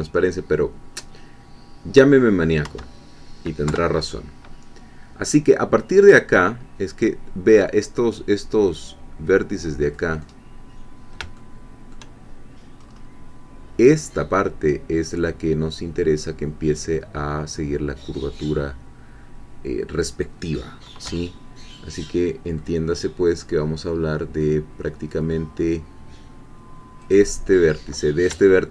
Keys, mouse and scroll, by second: 2.6 scroll down 1, 2.6 1, 3.7 3, 6.3-7.7 scroll up 1, 7.7 scroll up 1, 7.9-10.5 middle drag, 10.5-11.2 scroll down 2, 11.4 shift+middle click, 12.3-13.9 shift+scroll down 1, 18.1-21.1 middle drag, 21.1 3, 22.6-24.1 middle drag, 24.4-25.5 middle drag, 27.1-28.3 drag.